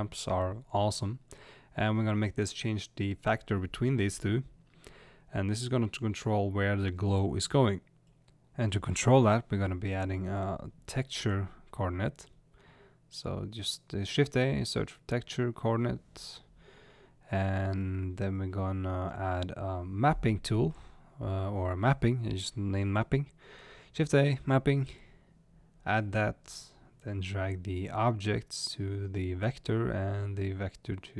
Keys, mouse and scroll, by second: 1.3 click, 5.5-10.3 drag, 10.3-10.9 scroll down 1, 17.7 click.